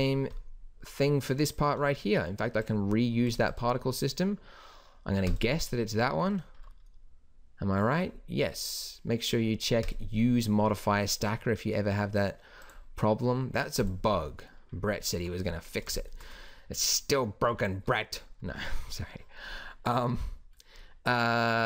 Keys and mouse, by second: 0.3-1.5 middle drag, 10.6-11.7 middle drag, 12.6-16.1 middle drag, 17.8 middle click.